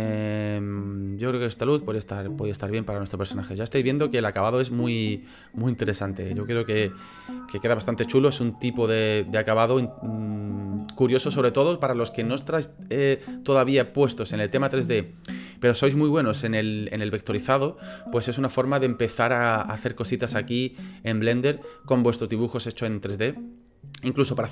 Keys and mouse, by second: 1.5-2.6 drag.